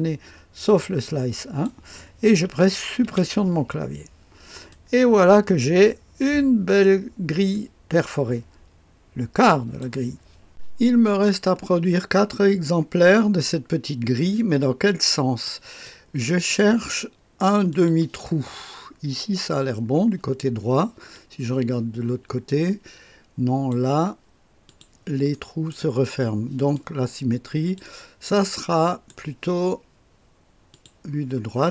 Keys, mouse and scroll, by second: 3.0 Delete, 4.7-10.7 drag, 11.5 scroll down 1, 13.4-17.0 drag, 17.7 click, 18.5-19.8 scroll up 2, 19.8-21.1 scroll down 3, 21.1-23.8 drag, 24.6 click, 25.3 click, 25.3 right click, 26.7-28.5 drag, 28.7-29.8 right drag, 30.7 click.